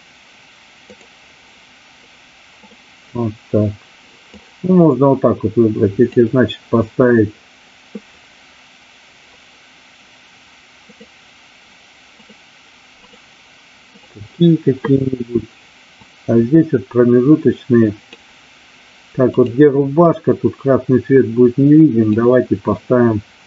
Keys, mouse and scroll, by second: 0.8 click, 2.4 click, 4.3-6.2 drag, 12.2-13.2 drag, 13.9 click, 16.1-18.2 drag, 19.3 click, 20.1-22.1 drag.